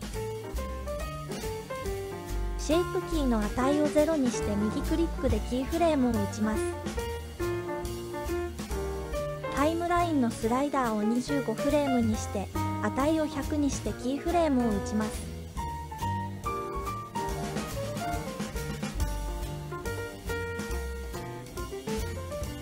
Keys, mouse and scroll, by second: 1.1-2.3 drag, 4.6-6.5 right drag, 9.2-15.4 drag, 17.1-18.6 drag, 21.3-22.6 right drag.